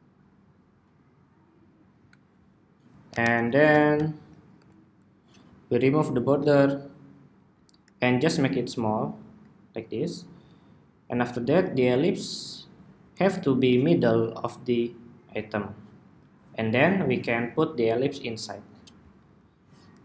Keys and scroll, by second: 2.2 super+=, 2.7 super+=, 19.2 alt+Right, 19.4 alt+Right, 19.6 alt+Right.